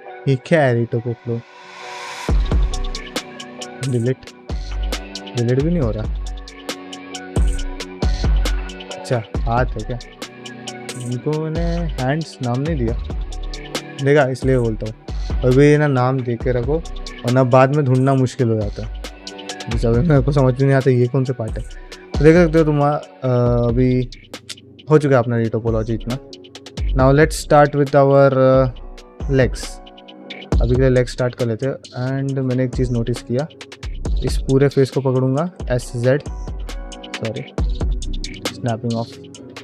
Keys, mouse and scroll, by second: 1.0 ctrl+middle click, 1.3 ctrl+middle drag, 1.7 g, 2.5 right click, 3.2 x, 3.9 ctrl+middle click, 4.4 x, 5.4 middle click, 6.2 click, 7.6 KP_Divide, 8.0 middle drag, 8.5 ctrl+middle click, 8.8 ctrl+middle click, 9.1 g, 18.6 shift+middle drag, 19.4 middle drag, 19.8 click, 20.2 ctrl+middle drag, 20.6 click, 20.8 ctrl+middle drag, 21.1 drag, 21.4 shift+middle click, 21.8 ctrl+middle click, 22.0 middle drag, 22.4 ctrl+middle click, 22.7 shift+middle click, 23.2-23.6 middle drag, 24.6 click, 25.0 middle drag, 25.3 click, 25.6 ctrl+middle click, 25.8 middle drag, 26.3 middle drag, 26.7 shift+middle drag, 27.0 ctrl+middle click, 27.3 shift+middle drag, 27.6 shift+middle drag, 28.0 middle drag, 29.1-30.6 middle drag, 31.0 click, 31.3 Tab, 31.9 ctrl+middle click, 32.2 shift+middle click, 32.4 ctrl+middle click, 32.9 3, 33.4 alt+click, 33.8 shift+middle click, 34.4 alt+click, 35.3 s, 38.6 click, 39.3 s.